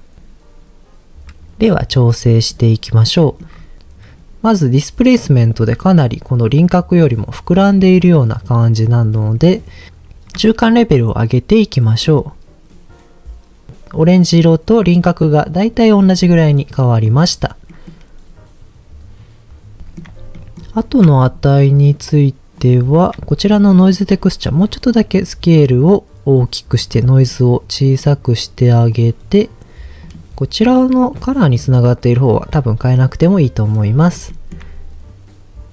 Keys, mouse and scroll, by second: 2.0-3.1 scroll up 1, 3.2 middle click, 3.5 scroll up 2, 4.1-5.3 middle drag, 9.1 scroll down 2, 9.3 middle click, 9.8-10.3 scroll up 1, 10.7-13.7 shift+drag, 16.3-17.1 middle drag, 17.6 middle drag, 19.8 shift+middle click, 19.8 scroll up 3, 20.4 middle click, 21.2 ctrl+shift+click, 22.6 ctrl+shift+click, 24.0 ctrl+shift+click, 24.9-26.8 drag, 27.2 ctrl+shift+click, 27.9 ctrl+shift+click, 28.9 ctrl+shift+click, 30.1 ctrl+shift+click, 32.2 ctrl+shift+click, 33.1 middle click, 33.8 scroll down 1, 34.3 shift+middle drag.